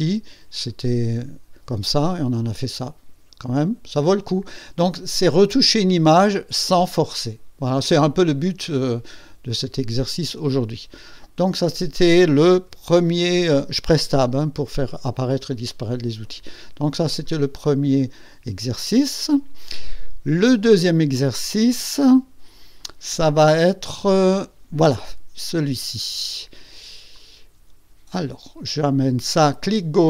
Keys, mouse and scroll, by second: 0.5 click, 1.9 scroll down 2, 3.1 scroll up 2, 3.6 scroll down 2, 7.5 scroll up 2, 9.4 click, 10.9 click, 12.6 Tab, 14.0 Tab, 17.1 click, 19.0 click, 22.8 click, 27.1-30.0 drag.